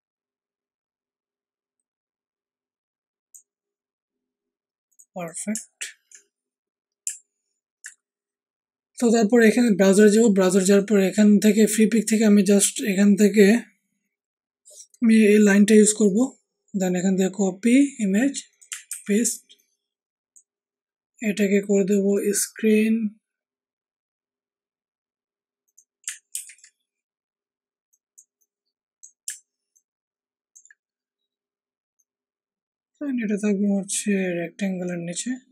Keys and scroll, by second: 18.8 ctrl+v, 26.3 ctrl+t.